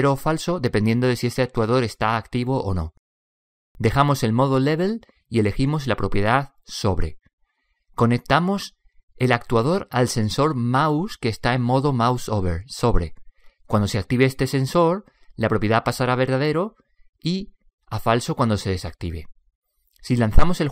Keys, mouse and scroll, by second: 5.3 click, 8.4-12.8 middle drag, 12.8 click.